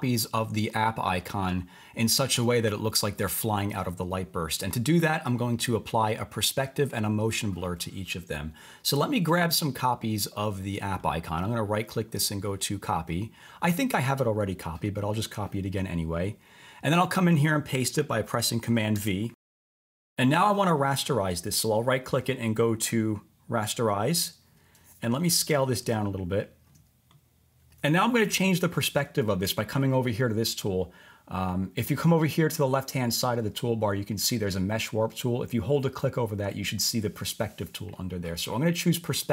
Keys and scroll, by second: 18.9 super+v.